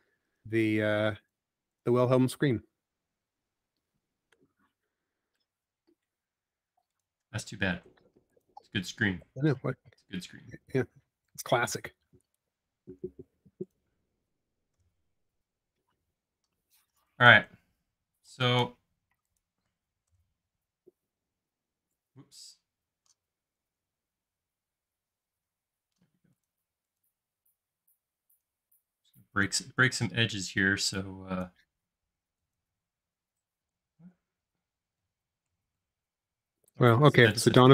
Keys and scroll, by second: 9.5 BackSpace, 10.7 e, 13.3 space, 14.8 BackSpace, 16.8 e, 19.2 space, 20.1 BackSpace, 23.8 super+z, 24.3 super+z, 25.8 e, 34.0 super+z.